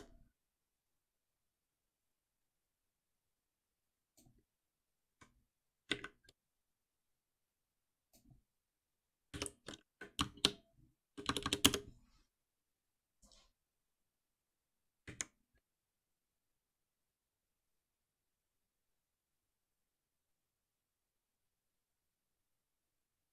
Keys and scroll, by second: 9.3 shift+F6.